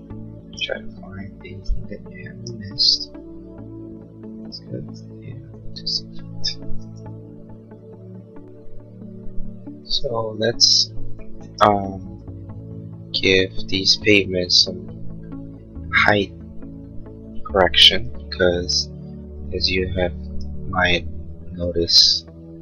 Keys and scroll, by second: 6.8 ctrl+s.